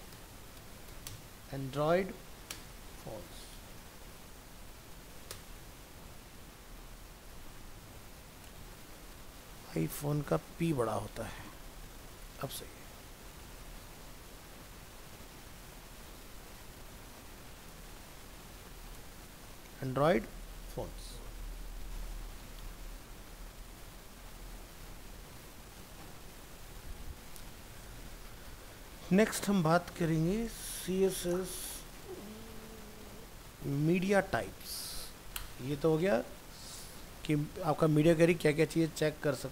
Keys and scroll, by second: 6.8 ctrl+s, 8.5 ctrl+Left, 10.1 ctrl+Right, 13.3 ctrl+s, 19.8 ctrl+s, 26.0 ctrl+s, 36.8 ctrl+s.